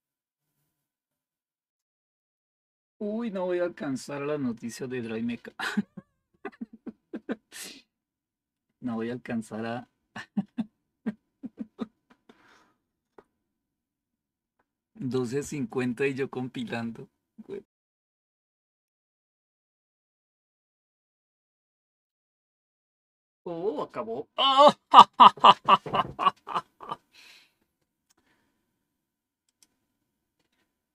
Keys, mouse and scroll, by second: 29.3 click.